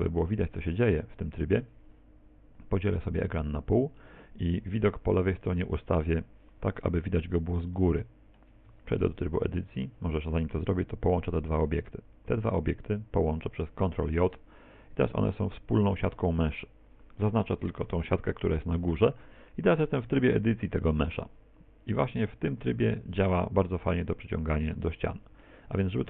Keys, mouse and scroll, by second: 0.0 middle click, 1.1 middle click, 3.2 click, 6.9-8.0 scroll up 4, 8.0 shift+middle click, 8.8 Tab, 9.8 Tab, 11.2 shift+right click, 14.4 ctrl+j, 15.5 Tab, 16.7 a, 17.9 l.